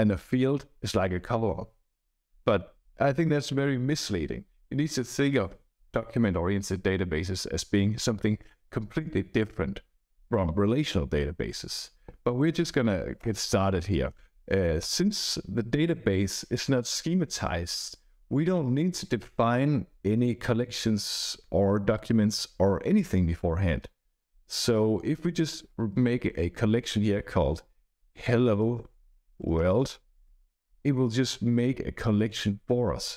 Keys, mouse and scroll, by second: 13.1 Return, 14.7 ', 27.7-30.1 typing, 30.2 Right, 30.5 Right.